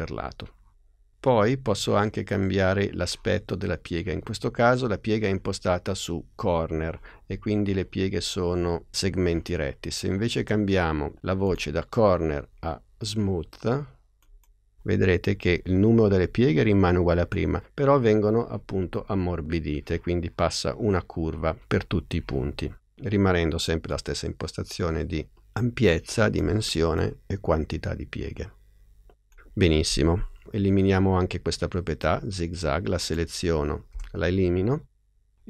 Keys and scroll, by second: 33.8 BackSpace.